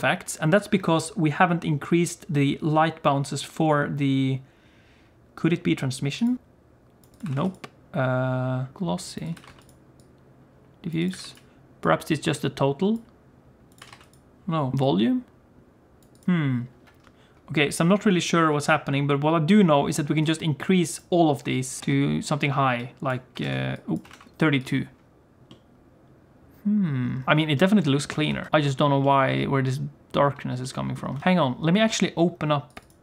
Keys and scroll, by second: 28.3 alt+a, 31.2 alt+a.